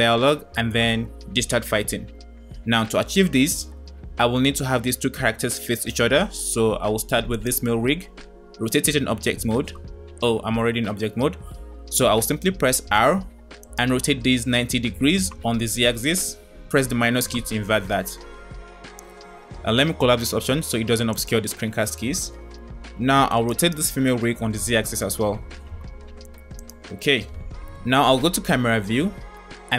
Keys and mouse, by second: 4.6-5.3 middle drag, 8.9 Tab, 12.6 r, 21.1 click, 23.5 click, 24.4 r, 28.2 KP_0.